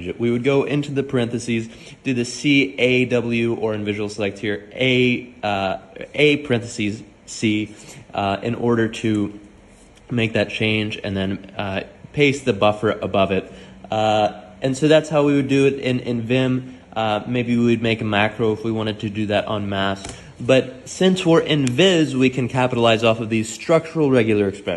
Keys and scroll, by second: 0.0-1.2 typing, 2.5-2.8 typing, 7.0-10.9 typing, 12.2-15.5 typing, 16.7-20.0 typing.